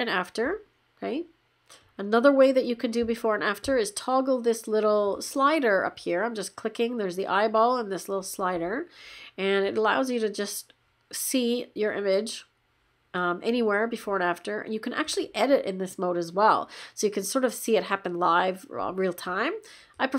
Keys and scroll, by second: 1.4 \.